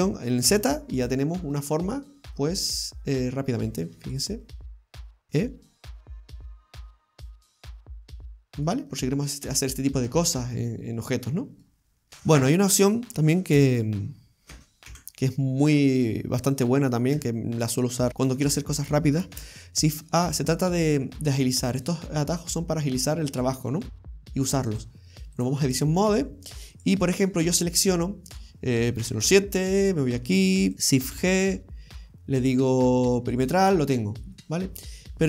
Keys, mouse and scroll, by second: 0.0 alt+shift+right click, 0.0 e, 1.3 middle click, 2.0-2.3 scroll down 1, 2.3 middle click, 3.8 right click, 4.1 alt+shift+right click, 4.2 right click, 5.2 e, 8.0 middle click, 8.9-9.4 scroll down 2, 9.7-10.4 scroll up 2, 10.4 middle click, 12.0 scroll up 1, 13.6 a, 14.9 Delete, 17.2 Tab, 18.1 Delete, 18.1 click, 18.1 scroll up 1, 18.1 KP_7, 18.4 click, 19.4 shift+a, 22.6-23.1 scroll up 3, 23.1 middle click, 23.6-24.1 scroll down 3, 24.8 click, 25.8 scroll down 1, 26.1-26.8 scroll up 3, 26.8 right click, 29.0 KP_7, 29.6-30.5 scroll up 1, 30.5 scroll up 1, 30.7 right click, 31.2 shift+g, 33.8-34.4 scroll down 4, 34.4 middle click.